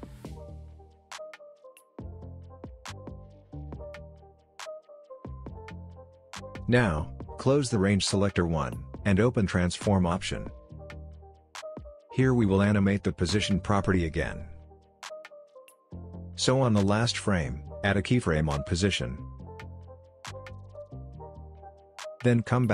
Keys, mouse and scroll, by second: 8.5 click, 11.6 click, 14.3-16.8 drag.